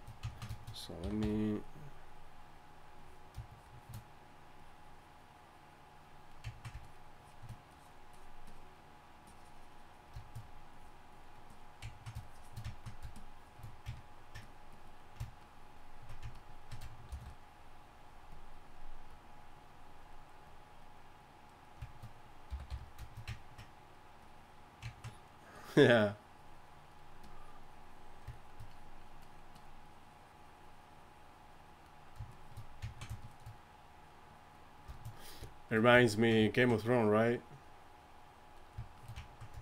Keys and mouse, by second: 1.0 y, 1.2 f, 4.4-6.5 drag, 6.8-13.9 drag, 17.1 shift+c, 20.6-23.1 drag, 22.5 y, 22.7 f, 24.2-31.9 drag, 32.3-36.5 drag.